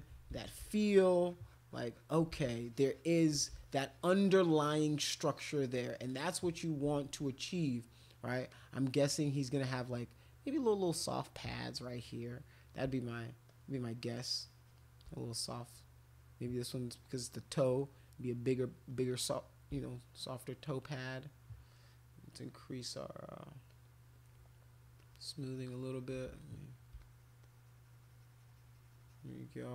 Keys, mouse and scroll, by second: 0.3 ctrl+z, 0.8 alt+click, 1.2 alt+click, 1.4 alt+click, 1.7 alt+click, 1.9 alt+click, 2.3 shift+click, 3.6-6.7 shift+drag, 7.1 click, 8.5 click, 9.8 click, 10.5 click, 10.8 click, 11.4 click, 11.8 click, 12.1 click, 12.8 shift+click, 13.4-14.9 shift+drag, 15.3 click, 15.6-17.1 drag, 17.3 click, 17.7 click, 17.9 click, 18.2 click, 18.3 click, 18.9 click, 19.7 shift+click, 20.8 shift+click, 23.7 shift+click, 25.0-26.0 shift+drag, 26.3 alt+click, 27.0 shift+click, 27.4-29.5 shift+drag.